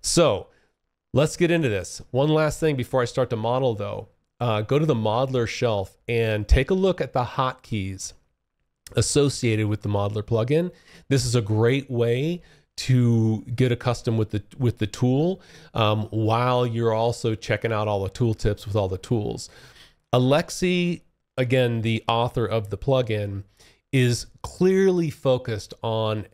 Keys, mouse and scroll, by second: 0.7 click, 5.6 click, 9.0 click, 15.0 click, 16.6 click, 18.1 click, 18.7 click.